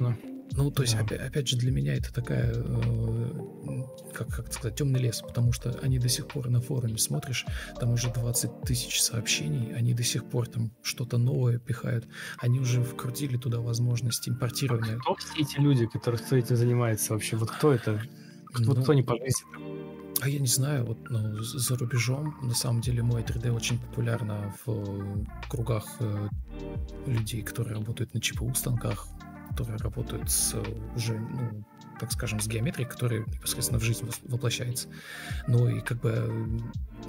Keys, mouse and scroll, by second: 8.3 Left, 8.4 Left, 8.5 Left.